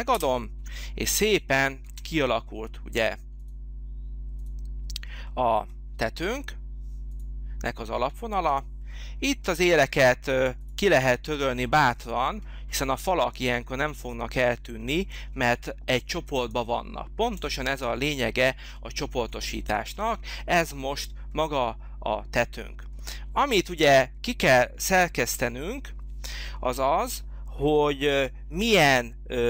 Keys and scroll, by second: 0.1 Return.